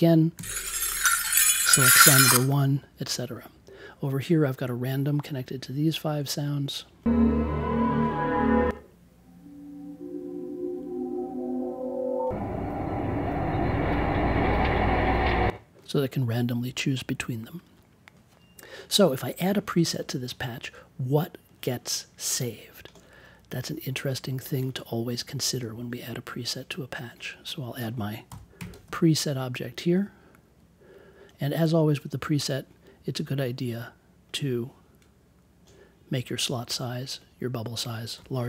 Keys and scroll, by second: 0.3 Down, 28.2 n, 28.5 p, 38.1 1.